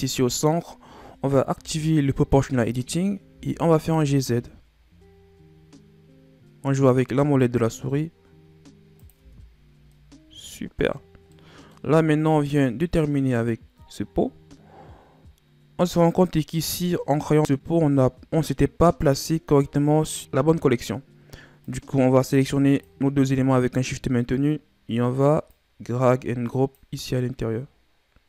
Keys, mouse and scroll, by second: 1.5 o, 3.3 g, 9.2 Tab, 9.6-9.9 scroll down 2, 9.9-10.5 middle drag, 10.5-11.0 scroll down 5, 11.3-12.0 middle drag, 12.2-13.6 middle drag, 14.0-16.1 scroll down 3, 16.1 click, 18.9 click, 21.6 click, 22.7 shift+click, 25.5 click, 28.2 click.